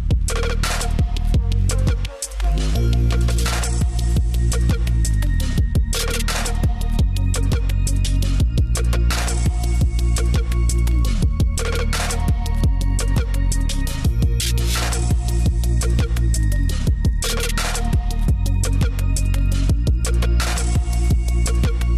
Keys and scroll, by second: 1.6 space, 6.5 space, 9.5 space, 9.7 space, 11.4 space, 11.4 scroll up 1, 12.3 scroll down 1, 13.7 space, 18.4 space, 19.9 space.